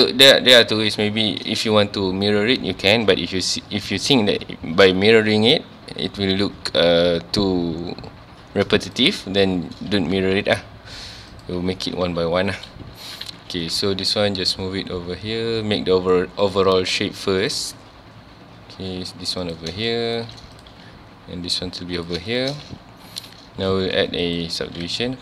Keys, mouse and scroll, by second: 0.4-0.7 scroll down 2, 0.7 shift+middle drag, 1.0-3.5 scroll up 2, 3.5-4.0 scroll up 1, 4.0 g, 9.0 click, 9.4-9.8 shift+middle drag, 9.8-10.1 scroll up 2, 10.1 g, 11.4 click, 11.7 Tab, 12.0 1, 12.6 click, 13.1 g, 13.8 right click, 14.1 g, 16.5 click, 17.4 click, 17.6 g, 19.5 click, 19.9 shift+middle click, 20.6 click, 20.7 g, 22.1 click, 22.3 shift+middle click, 23.0 ctrl+s, 23.3 scroll up 1, 23.8 ctrl+r, 24.9 click.